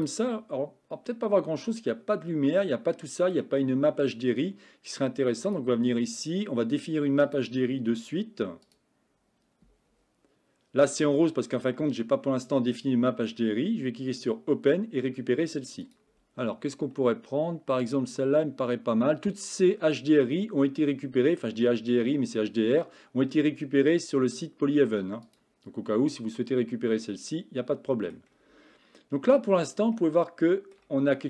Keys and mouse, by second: 2.3-3.4 middle drag, 5.5 click, 15.9 drag, 26.8-28.2 middle drag, 30.0-30.8 shift+middle drag.